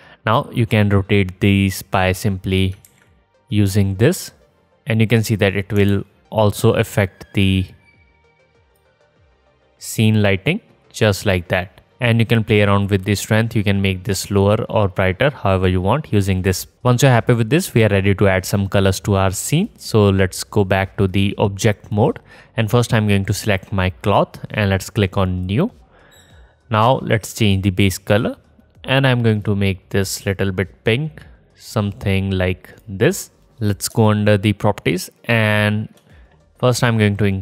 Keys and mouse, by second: 3.7-5.1 drag, 5.3 ctrl+z, 8.2 KP_0, 21.7 click, 23.4-24.5 middle drag, 24.5-26.2 drag, 26.2-28.5 middle drag, 28.5-34.5 drag, 34.5 middle click, 34.6-37.4 alt+shift+drag.